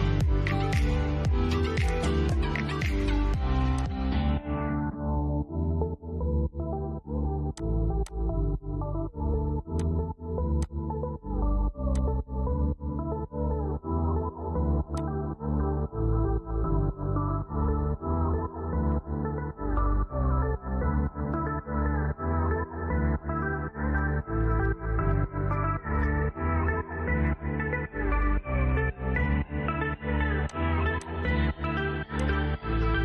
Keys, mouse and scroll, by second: 1.1-6.4 drag, 6.8 click, 8.1-9.0 scroll down 1, 9.0 click, 11.9 scroll down 1, 12.9-14.1 shift+middle drag, 14.1-17.3 drag, 23.3 click, 23.4 shift+middle click, 25.4-25.9 scroll up 1, 26.4-29.7 shift+middle drag, 29.7 click, 32.9-33.0 shift+middle drag.